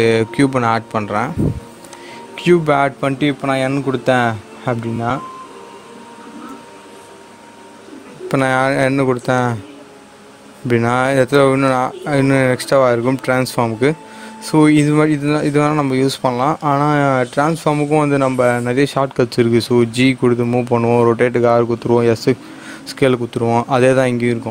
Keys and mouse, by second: 1.8 click, 6.4 n, 8.8 click, 11.7 click.